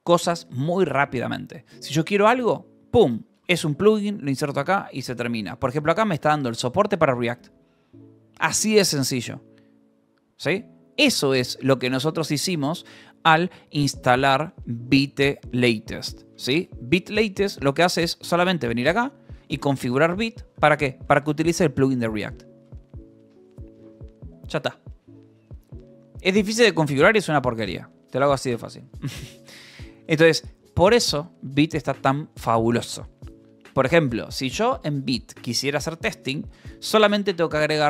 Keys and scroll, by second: 3.8 shift+v, 4.8 Escape, 5.6 v, 6.1 Escape, 6.8 shift+v, 6.9 Escape, 10.9 k, 12.4 shift+v, 12.7 Escape, 18.2-21.7 typing, 19.1 Escape, 22.1 Escape, 28.8 k, 30.3 j, 30.7 k, 32.0 j.